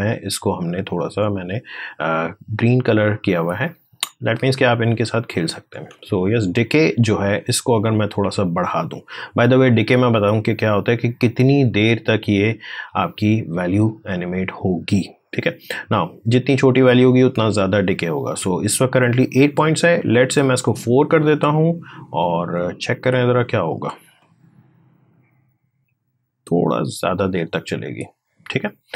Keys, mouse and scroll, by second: 4.5 click, 5.7 alt+Tab, 7.9-12.1 drag, 13.6 click, 14.5-15.8 scroll down 1, 15.8-20.0 drag, 20.3 4, 21.1-23.8 drag, 23.8 space, 28.6 space.